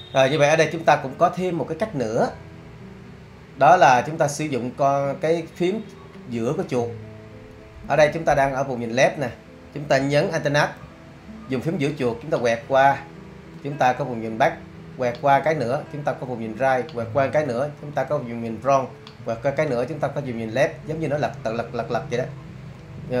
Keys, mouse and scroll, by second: 5.1-10.0 middle drag.